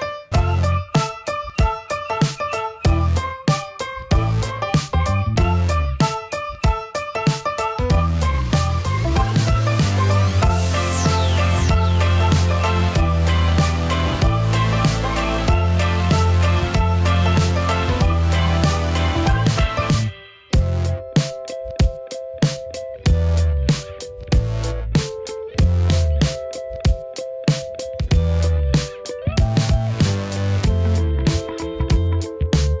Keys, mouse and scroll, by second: 1.0 click, 1.9 shift+a, 4.7 r, 6.8 s, 9.0 click, 11.5 ctrl+a, 14.0-14.9 drag, 15.2-15.7 drag, 15.7-16.0 middle drag, 16.6 shift+middle drag, 18.1 click, 19.8-21.1 drag, 21.8 click, 23.6-24.0 shift+middle drag, 24.2-24.6 middle drag, 25.4-29.0 drag, 29.5 click, 30.9-32.8 middle drag.